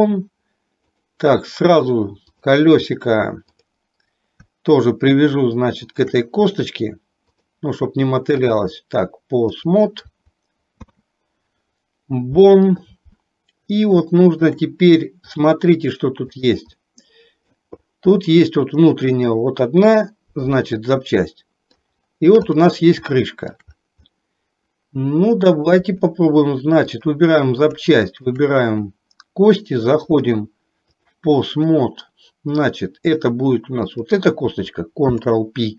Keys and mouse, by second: 1.0 click, 2.4 click, 3.7 click, 5.9 shift+click, 7.5-8.7 drag, 9.7 click, 10.8 ctrl+p, 14.2 shift+middle click, 15.5-16.5 drag, 16.8 middle click, 18.3 middle click, 20.5-21.9 middle drag, 22.5 click, 23.2 shift+middle click, 24.3-25.8 middle drag, 28.2 shift+click, 30.3-31.3 drag, 31.8-32.9 middle drag, 34.0 click, 35.2 ctrl+p.